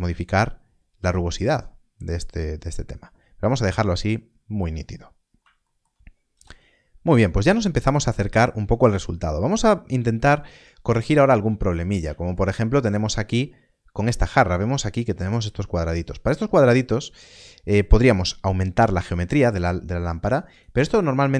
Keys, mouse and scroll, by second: 3.8 middle click, 4.7 scroll down 1, 5.6 shift+middle click, 6.3 KP_0, 7.1 scroll down 1, 8.4 shift+middle click, 11.4 scroll up 1, 12.3 shift+middle click, 17.3 click, 20.4 click.